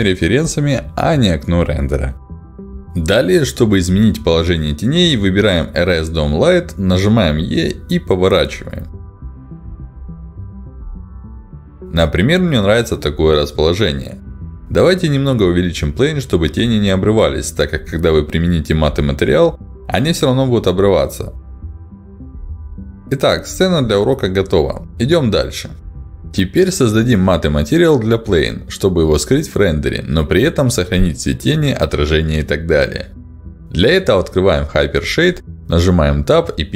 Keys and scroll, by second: 5.6 e, 17.4 r, 22.9 q, 36.5-36.7 typing.